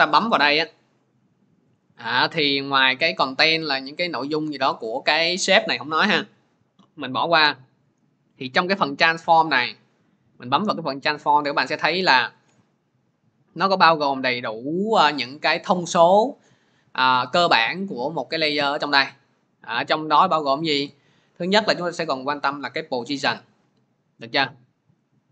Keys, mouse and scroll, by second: 3.3 click, 3.8 click, 4.3 click, 4.7 click, 7.0 click, 9.1 click, 23.0 click.